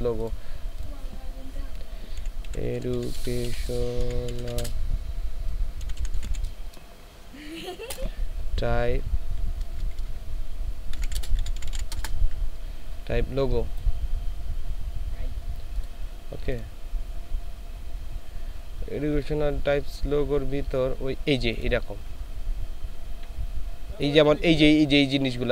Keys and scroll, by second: 2.2-4.6 typing, 5.8-6.3 typing, 7.8 space, 9.6-11.9 typing.